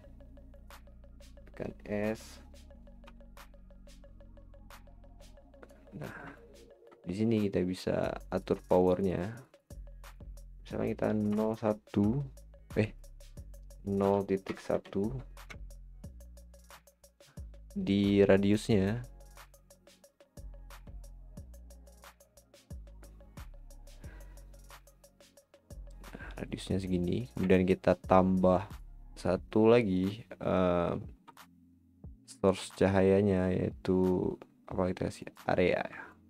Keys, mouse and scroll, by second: 3.0 s, 5.9-6.4 scroll up 6, 6.4-8.3 middle drag, 8.3-21.5 drag, 27.5-35.3 middle drag, 31.1 shift+a, 36.1-36.2 middle drag.